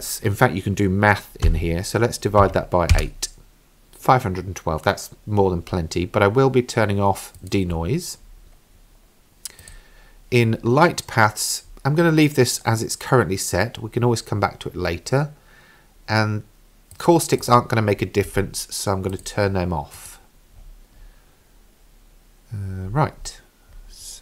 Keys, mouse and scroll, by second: 7.4 click, 8.1-9.6 scroll down 6, 9.6 click, 14.2-15.3 scroll down 5, 17.0 click, 17.4 click, 19.1 click, 20.2 click, 20.6-22.3 scroll up 4, 22.9-24.2 scroll up 4.